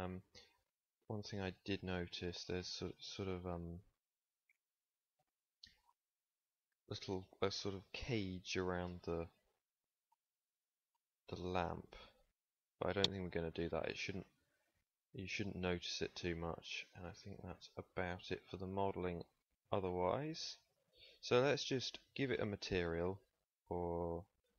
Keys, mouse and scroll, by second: 6.3 KP_3, 13.2 ctrl+s, 18.8-19.9 middle drag, 20.9 ctrl+s.